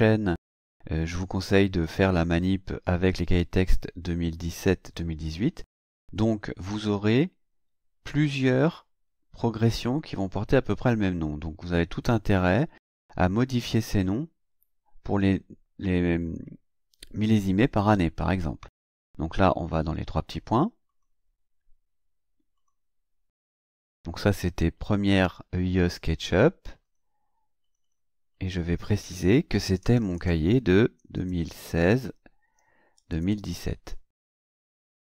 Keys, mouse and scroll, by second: 20.9 click, 22.5 click, 26.8 click, 27.6 click, 28.3 click, 29.8-31.6 typing, 32.9 KP_2, 33.1 KP_0, 33.3 KP_1, 33.5 KP_7.